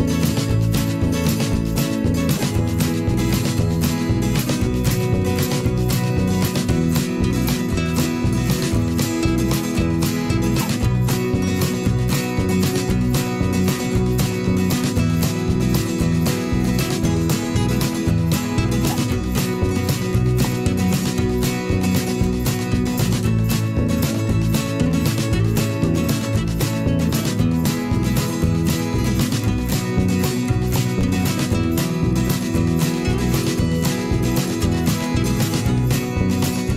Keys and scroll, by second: 0.2 ctrl+z, 0.7 ctrl+z, 4.1 v, 8.3 ctrl+shift+[, 31.9 ctrl+].